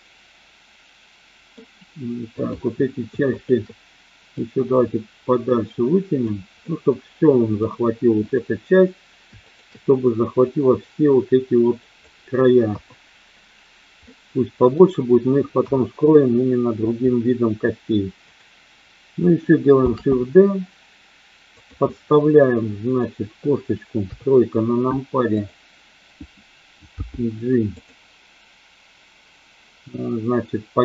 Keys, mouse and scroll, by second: 2.4 click, 3.2 shift+click, 4.4-6.2 drag, 6.6-7.6 middle drag, 8.1 click, 9.4 shift+click, 10.4-12.1 drag, 12.6 KP_1, 14.0 middle click, 18.2 click, 19.7 shift+d, 21.9-23.0 middle drag, 24.0 KP_3, 25.4 click, 27.0 g, 27.6 click.